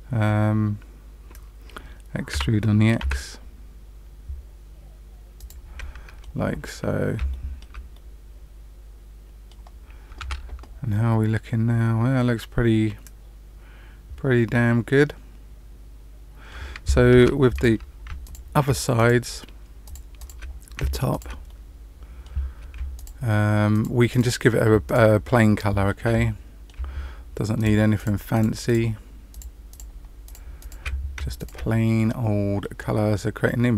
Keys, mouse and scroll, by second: 2.3 e, 5.7 middle click, 6.8-7.2 scroll down 2, 7.2 shift+middle click, 7.9 middle click, 10.1 Tab, 10.9 middle click, 17.1 Tab, 17.5 click, 18.2 shift+click, 18.9 shift+click, 19.8 shift+click, 20.3 click, 21.0 shift+click, 21.4 middle click, 22.9 shift+click, 23.7 shift+click, 24.0 shift+click, 24.8 shift+click, 25.2 shift+middle click, 26.0 middle click, 27.5 shift+click, 27.9 shift+click, 28.6 shift+click, 29.2 shift+click, 29.7 shift+click, 30.2 shift+click, 30.5 shift+click, 31.3 shift+click, 31.9 middle click.